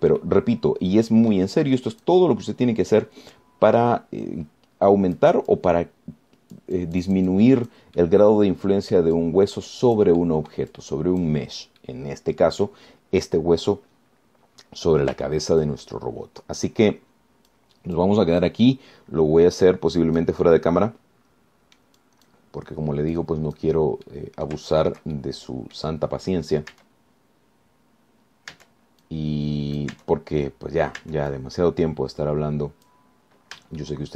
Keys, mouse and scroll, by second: 1.1 scroll down 2, 1.4-2.8 drag, 3.9 middle click, 4.6-6.6 drag, 6.7-9.1 drag, 9.2-10.4 middle drag, 11.4 middle click, 12.6 click, 12.7 scroll down 2, 13.0-14.0 drag, 16.0-16.4 scroll up 2, 16.5 shift+click, 17.2-17.7 shift+scroll up 3, 18.1 click, 19.2 click, 20.9-23.2 drag, 23.7-24.1 scroll up 1, 24.4 click, 25.3 click, 26.0 shift+click, 26.4 shift+click, 28.0 Tab, 29.8 Tab, 30.2-31.2 drag, 32.2 Tab, 32.5-34.1 drag.